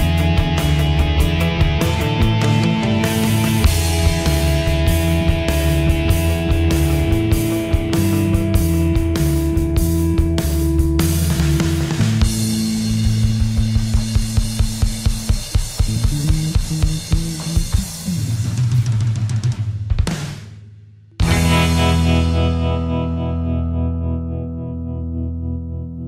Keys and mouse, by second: 1.1 Escape, 2.6 click, 13.9 shift+middle click, 17.2 click, 24.5 shift+middle click.